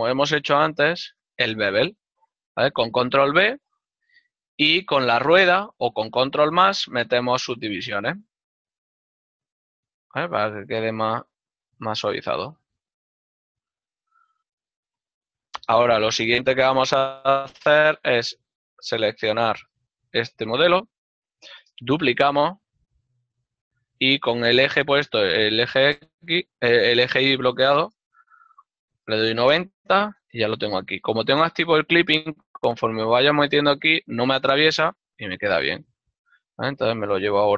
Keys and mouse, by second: 1.0 shift+right click, 3.2 ctrl+b, 6.3 ctrl+KP_Add, 13.9 Tab, 14.4 ctrl+middle click, 18.1 Tab, 19.3 click, 20.4 right click, 20.6 l, 21.2 ctrl+middle click, 23.0 shift+d, 23.8 r, 28.5 KP_0, 29.5 Return, 29.5 KP_Enter, 30.6 typing, 32.0 g, 35.5 click, 35.9 g.